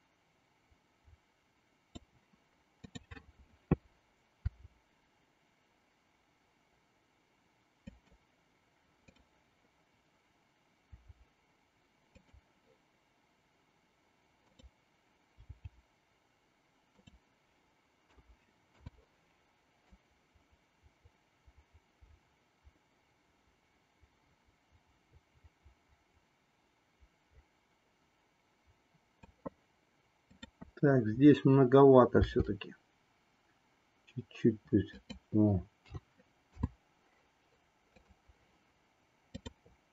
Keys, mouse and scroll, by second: 2.9-4.0 drag, 4.5 r, 10.9 r, 14.5-15.6 drag, 15.6 g, 18.0 a, 18.8 i, 19.9-29.4 drag, 32.3 r, 35.8 a, 36.5 i, 38.0 click, 39.3-39.9 drag.